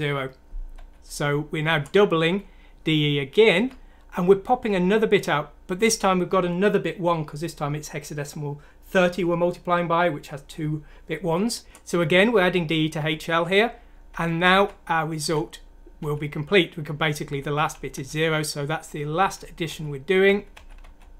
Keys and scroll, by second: 0.7 F7, 1.6 F7, 3.5 F7, 12.9 F7, 14.5 F7, 15.2 F7, 16.0 F7, 17.5 F7, 17.9 F7, 19.2 F7, 19.6 F7, 20.2 F7, 20.5 F7.